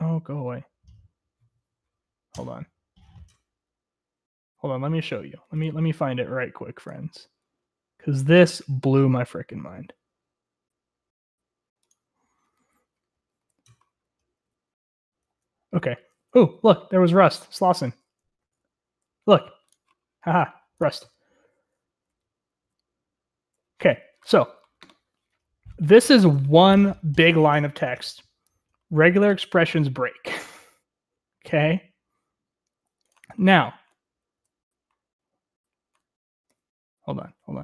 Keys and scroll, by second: 14.1 Right, 15.4 Right, 16.4 Left, 17.3 Left, 17.6 Left, 19.4 Right, 23.4 Right, 24.0 Right, 34.4 Right, 36.7 Right, 37.5 Right.